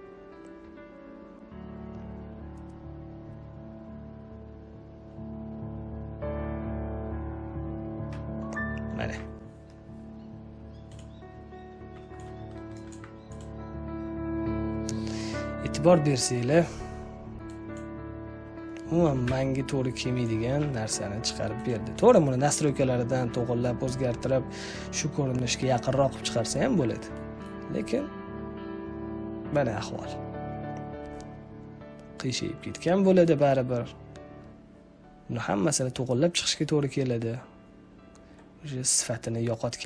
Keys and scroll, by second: 19.1 Delete, 20.5 z.